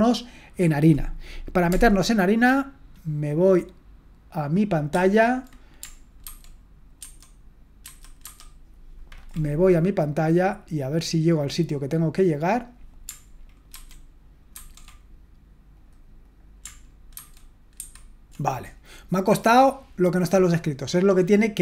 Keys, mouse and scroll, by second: 5.0 super+1, 6.3 ctrl+2, 7.0 ctrl+1, 7.8 ctrl+1, 8.2 ctrl+2, 11.0-13.7 drag, 13.7 ctrl+1, 14.5 ctrl+2, 17.2 ctrl+2, 17.8 ctrl+1.